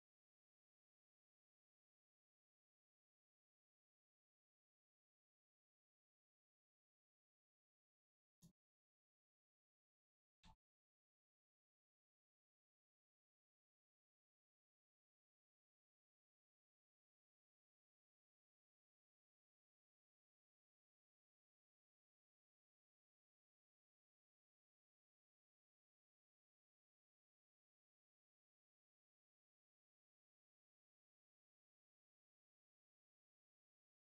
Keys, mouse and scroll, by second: 8.3 click, 10.5 middle click, 11.8 shift+click.